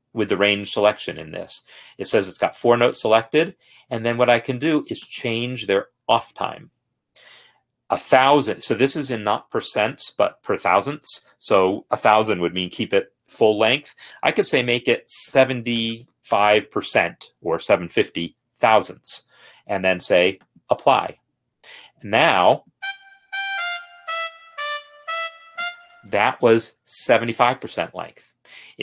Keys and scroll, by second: 15.5-16.6 typing, 23.4 space, 25.6 space.